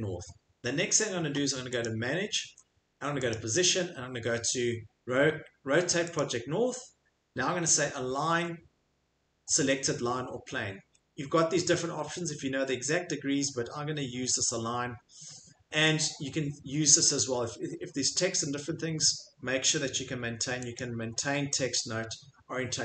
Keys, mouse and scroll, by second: 1.8 click, 3.3 click, 6.2 click, 17.1 click, 20.8 click.